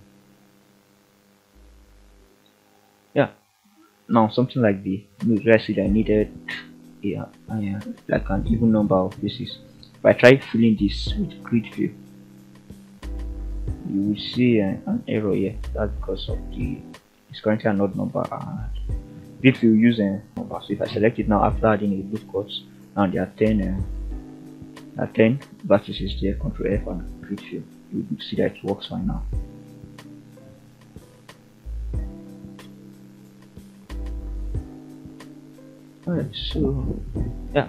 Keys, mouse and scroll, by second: 2.5 click, 2.9 click, 4.3 ctrl+f, 10.5 shift+middle click, 12.5 ctrl+r, 17.6 click, 17.8 click, 24.2 ctrl+f, 27.5 click, 29.3 Tab, 29.6-30.2 scroll down 3, 30.2-30.6 middle drag, 30.8 scroll down 2, 31.2 shift+middle drag, 32.0-33.1 middle drag, 33.4 scroll up 2, 33.9-34.2 shift+middle drag, 34.5-35.1 scroll down 3, 34.8-35.7 middle drag, 35.8-36.2 scroll up 3, 36.3 shift+middle drag, 36.7-37.1 scroll up 2, 37.1 Tab.